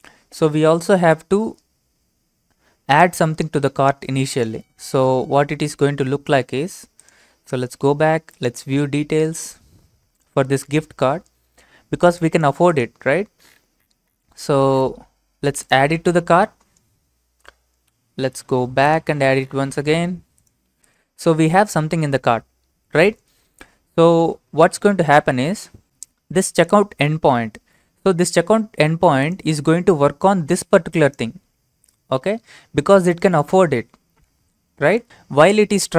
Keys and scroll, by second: 24.7 alt+Tab, 34.9 alt+Tab.